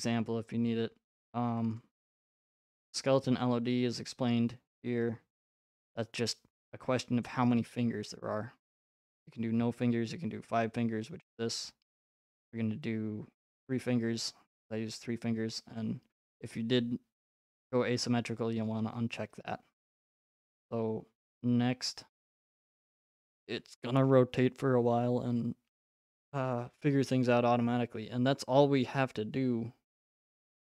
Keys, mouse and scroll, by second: 1.8 click, 13.7-15.7 drag, 21.8-23.9 drag.